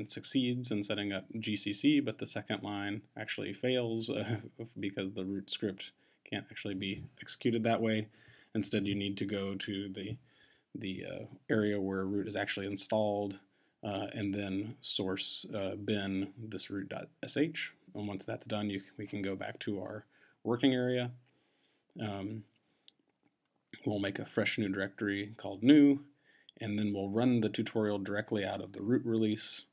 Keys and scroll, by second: 3.4 Up, 7.7 Return, 9.8 Tab, 12.4 Return, 15.2 Return, 18.0 Return, 23.8 Tab, 27.1 Tab.